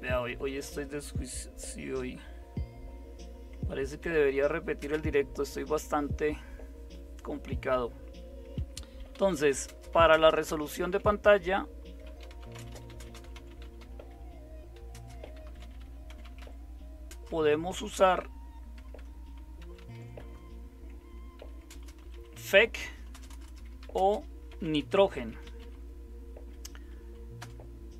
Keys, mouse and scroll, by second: 0.1 Delete, 0.2 Delete, 0.4 Delete, 0.6 Delete, 4.0 #, 4.8 space, 8.9-26.1 typing, 27.4 typing.